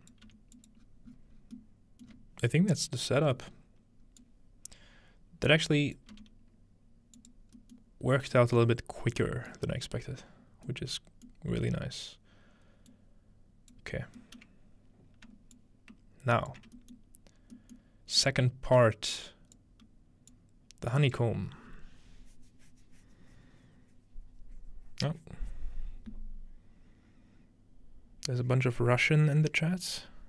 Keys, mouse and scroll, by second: 0.3 g, 0.8-2.1 scroll down 1, 2.1-2.7 middle drag, 2.1-2.7 scroll up 1, 3.2-4.2 scroll up 1, 4.2-6.1 drag, 6.1 g, 7.2 click, 7.8 middle click, 8.1-9.2 scroll up 2, 8.6-9.3 middle drag, 9.2-9.9 scroll up 1, 9.4-10.7 middle drag, 9.9-10.3 scroll down 2, 11.3-12.9 middle drag, 11.3-11.7 scroll down 1, 12.9-14.4 drag, 14.0-15.6 scroll down 1, 14.7 middle click, 15.6 shift+click, 16.8 shift+middle click, 17.4 scroll down 1, 17.8-19.6 middle drag, 18.2 click, 19.1 click, 20.3 click.